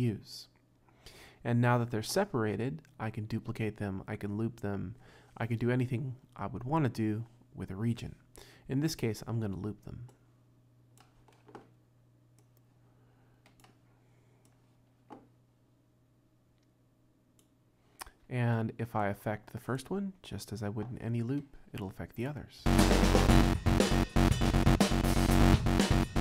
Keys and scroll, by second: 22.6 space.